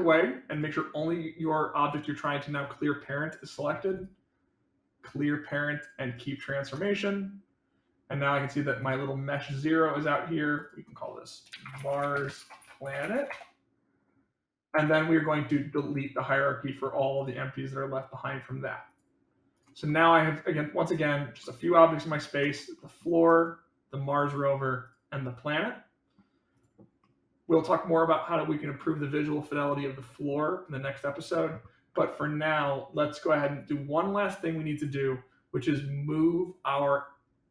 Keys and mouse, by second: 0.4 click, 8.3 click, 9.4 click, 10.0 click, 10.5-14.0 drag, 14.8 click, 19.5 click, 19.8-20.5 middle drag, 21.4 middle click, 22.4 click, 22.7 middle click, 23.3 click, 24.8 click, 25.2 middle click, 26.6 click, 27.0-28.8 middle drag.